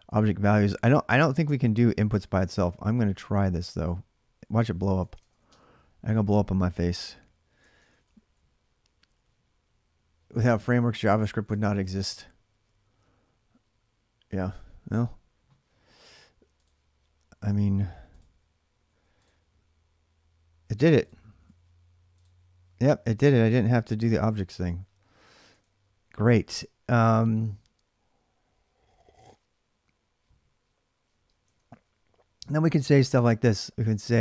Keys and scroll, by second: 1.7-2.2 x, 3.3-5.6 typing, 7.4 ctrl+[, 7.6 typing, 7.8 Return, 11.1 ctrl+[, 11.2-11.9 typing, 14.1 alt+Tab, 14.1 typing, 18.3-19.1 typing, 20.9-21.8 typing, 23.3 alt+Tab, 25.3 ctrl+[, 25.4 j, 31.1-31.9 typing.